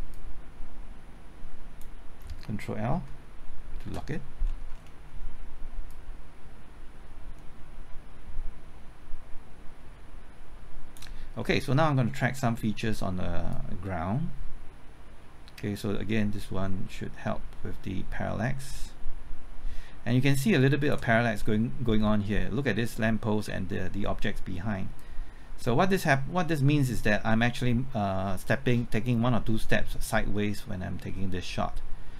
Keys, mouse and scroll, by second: 3.8 ctrl+l, 4.4-5.0 scroll down 1, 5.0-5.9 scroll up 1, 5.9-11.4 drag, 11.4 middle click, 11.8 scroll up 1, 12.2 middle click, 12.6-13.5 scroll up 1, 13.5-21.1 drag, 21.1 scroll up 1, 21.4-22.5 middle drag, 25.0-32.1 drag.